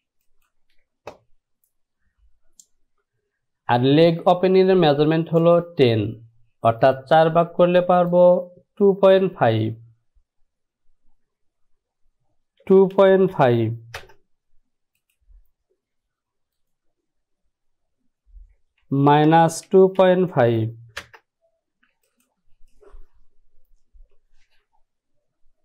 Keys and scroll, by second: 11.3 Down, 12.7 KP_2, 13.1 KP_Decimal, 13.4 KP_5, 14.1 Return, 18.9 Down, 19.2 KP_Subtract, 19.8 KP_2, 20.1 KP_Decimal, 21.1 e.